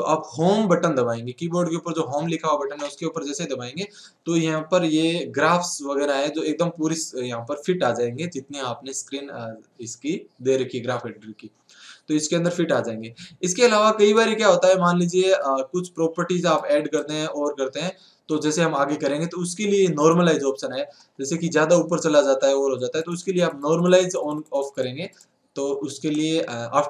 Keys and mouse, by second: 16.7-18.1 right drag, 21.5 ctrl+z.